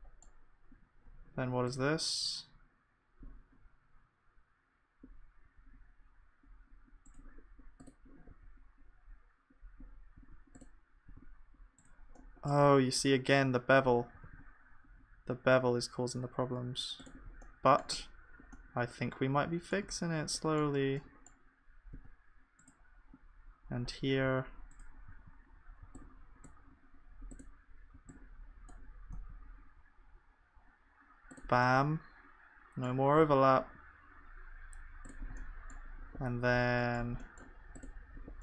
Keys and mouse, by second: 8.3-14.2 drag, 8.3 g, 11.1 g, 14.2 s, 18.0 Tab, 19.8 Tab, 22.0 g, 22.6-24.3 middle drag, 24.3 b, 25.8 b, 27.9 b, 29.1 g, 31.7-34.4 middle drag, 35.4-38.1 middle drag.